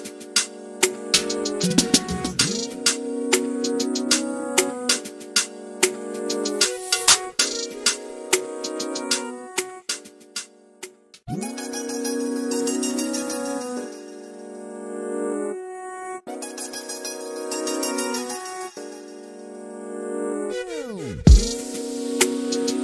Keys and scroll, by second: 4.5 typing.